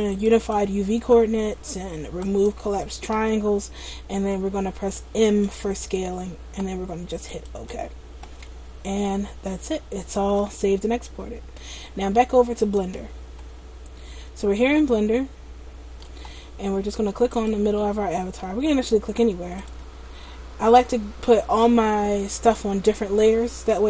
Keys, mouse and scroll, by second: 14.3 middle click, 17.4 click, 17.9 middle click, 18.7 scroll up 1, 18.8-19.8 scroll down 1, 19.8 click, 19.8-20.9 scroll down 1.